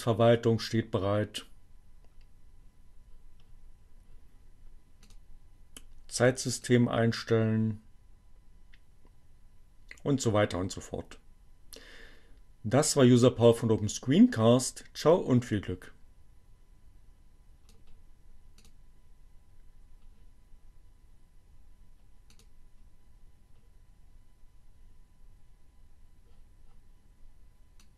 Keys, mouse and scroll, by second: 5.0 click, 6.6-17.5 drag, 18.6 click, 22.4 click, 27.7 click.